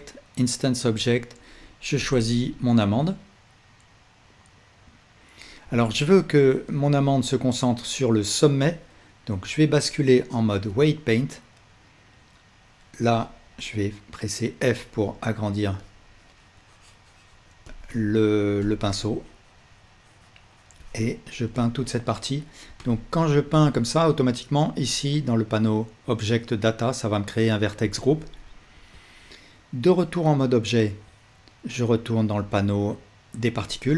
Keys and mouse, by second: 5.7-12.7 alt+drag, 9.6 ctrl+Tab, 14.9-15.9 drag, 28.1-32.6 alt+middle drag, 28.8 ctrl+Tab.